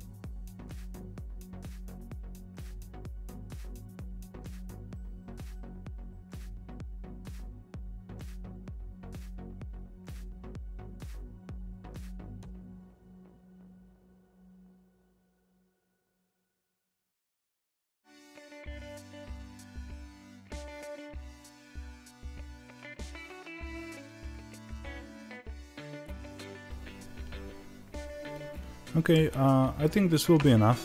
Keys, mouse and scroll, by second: 0.2 middle click, 0.7 g, 2.2 middle click, 2.6 click, 2.7 middle click, 3.8 shift+click, 3.9 g, 6.0-7.3 middle drag, 6.5 Tab, 7.3 click, 7.3 Tab, 7.5 click, 7.7 g, 8.4 ctrl+b, 8.8 click, 8.9-10.4 middle drag, 10.4 click, 10.6 ctrl+b, 11.6 click, 11.6 middle click, 12.3 click, 12.4 ctrl+b, 14.3 middle click, 14.6-16.7 drag, 19.4-21.9 middle drag, 19.5 Tab, 21.9 click, 22.2 g, 22.6 click, 22.8 g, 23.7-24.2 scroll up 2, 24.2 shift+middle click, 24.2 scroll down 2, 24.5 click, 24.5 g, 25.0-30.8 middle drag, 25.4 Tab.